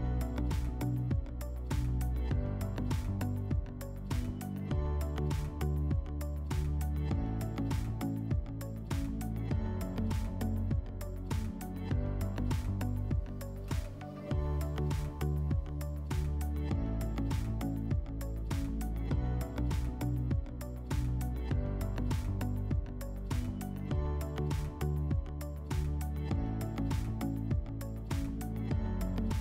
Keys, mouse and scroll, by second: 0.4 right click, 1.7 click, 3.0 click, 5.2 click, 6.2 right click, 6.8 right click, 7.3 w, 10.7 shift+click, 12.5 click, 13.5 click, 17.1 click, 19.1 right click, 20.2 click, 21.2 click, 22.2 click, 24.1 right click, 25.2 click, 26.9 alt+w, 28.7 alt+middle click.